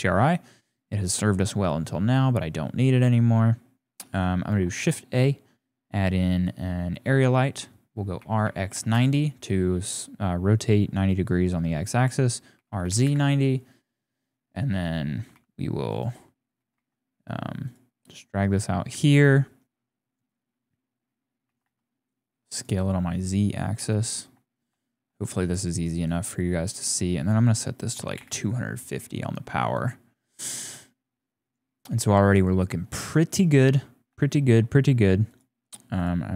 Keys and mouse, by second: 0.2 click, 3.5 click, 4.1 shift+click, 4.6 shift+a, 8.2 r, 12.5 r, 14.3 click, 15.1 g, 16.5 g, 19.8 click, 21.5 s, 22.8-23.8 drag, 24.0 shift+click, 24.4 click, 24.8 shift+click, 26.0 click, 26.8-28.1 drag, 34.2 shift+click, 36.0-36.3 drag.